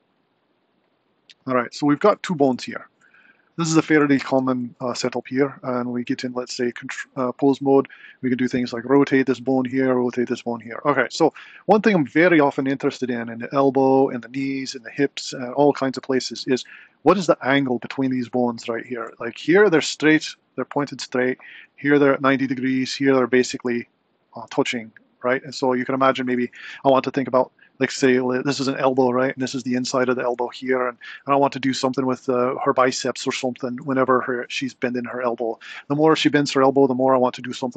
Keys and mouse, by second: 0.8 typing, 2.3 g, 4.4 Tab, 5.9 click, 6.7 r, 9.5 click, 9.9 r, 16.3 click, 17.0 r, 21.4 r, 29.1 r, 34.0 r.